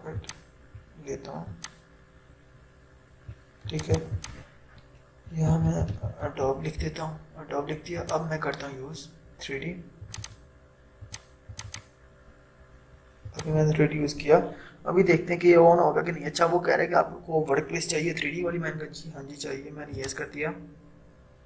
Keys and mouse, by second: 0.2-5.4 drag, 5.4-6.8 typing, 8.0 click, 20.0 click, 21.1 click.